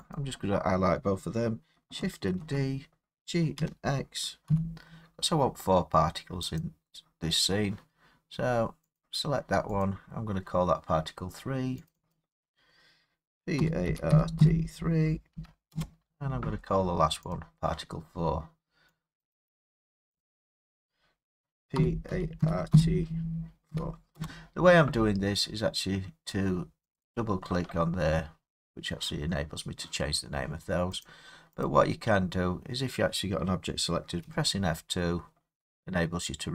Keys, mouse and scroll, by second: 0.0-2.4 typing, 0.2 shift+click, 3.6-4.5 typing, 6.6 click, 9.0 click, 9.8 click, 11.9 click, 12.1 click, 13.6-15.4 typing, 15.7 Return, 17.3 click, 17.3 typing, 19.2 click, 19.5 click, 20.2 click, 20.4 click, 21.8-23.7 typing, 24.2 Return, 27.0 click, 27.2 click, 28.7 typing, 31.1 click, 31.7 click, 34.2 F2.